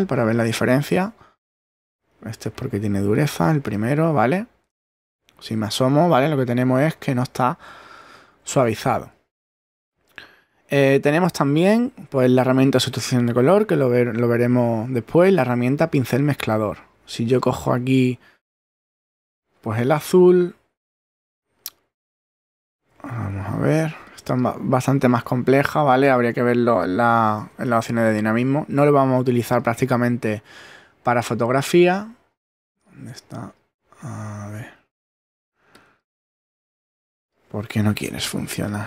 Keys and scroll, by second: 2.2 super+z, 5.1 super++, 7.8 super+-, 20.2 shift+<, 22.1 super+z, 22.6 shift+super+<, 25.1 super+z, 27.5 super+z, 36.6 super+z.